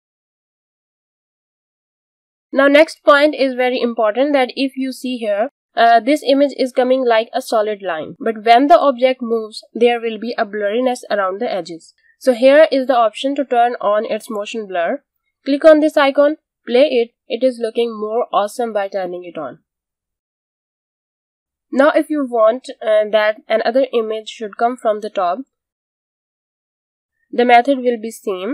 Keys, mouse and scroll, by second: 11.5 click, 14.5 click, 16.1 space, 21.7 space, 23.0 click, 24.0-24.6 alt+scroll down 1, 24.6-25.1 scroll down 1, 25.1 space, 25.4 click, 25.7 space, 28.4 click.